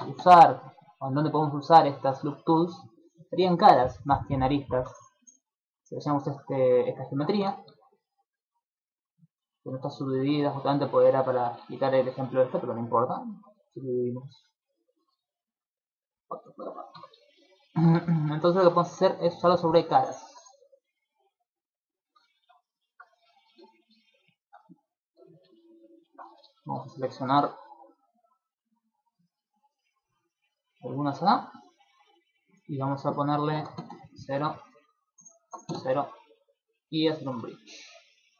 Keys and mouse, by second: 1.4 middle click, 1.7 shift+middle click, 2.1 ctrl+middle click, 2.3 middle click, 3.1 middle click, 3.3 shift+middle click, 3.6 middle click, 4.7 Tab, 5.5 right click, 6.1 shift+middle click, 6.7 middle click, 7.1 shift+middle click, 7.4 Tab, 7.9 middle click, 10.3 middle click, 10.7 middle click, 11.0 shift+middle click, 11.3 middle click, 11.7 ctrl+middle click, 12.5 middle click, 12.8 shift+middle click, 13.7 Tab, 14.7 Tab, 15.1-16.5 typing, 16.9 Tab, 17.7 shift+middle click, 17.9 Tab, 18.3 middle click, 18.5 ctrl+middle click, 18.7 ctrl+Tab, 20.2 right click, 21.1 ctrl+click, 22.3 middle click, 23.5 KP_7, 24.3 shift+middle click, 25.1 KP_5, 25.8 shift+middle click, 26.0 ctrl+middle click, 26.2 z, 26.5 shift+middle click, 27.3 b, 29.5 middle click, 30.1 shift+middle click, 30.3 middle click, 30.7 shift+middle click, 31.0 middle click, 32.9 click, 34.7 click, 36.5 click, 37.7 middle click, 38.2 shift+middle click.